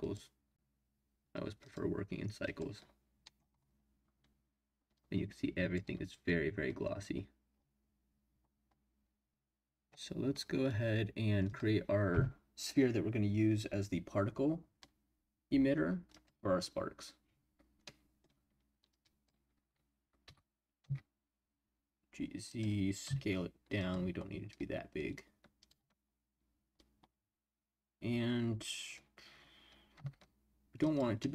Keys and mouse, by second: 1.6-2.7 drag, 3.2 middle click, 5.0 click, 11.4-16.2 drag, 17.8-18.2 middle drag, 18.9 click, 20.2 g, 20.8 z, 22.4 click, 23.0 s, 23.8 click, 25.2 click, 29.9 s, 30.8 click, 31.2-31.3 middle drag.